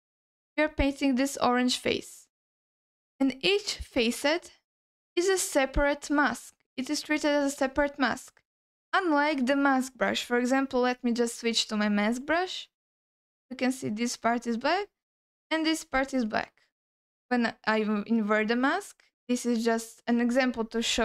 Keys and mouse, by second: 2.7 middle click, 8.4 alt+middle click, 9.7 shift+middle click, 11.8 m, 12.7-14.0 drag, 14.7-16.1 drag, 17.8 ctrl+i, 19.7-20.6 drag, 20.9 click.